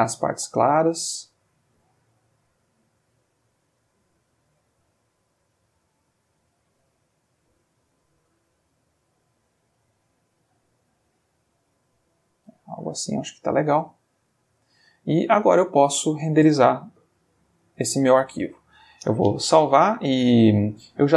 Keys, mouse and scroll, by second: 0.6-1.9 drag, 2.7 click, 3.8 click, 4.9 click, 6.4-7.5 drag, 7.9-8.9 drag, 9.2-11.9 drag, 12.7-15.7 middle drag, 15.8 ctrl+click, 16.5 ctrl+click, 17.6 ctrl+s, 18.6 Escape.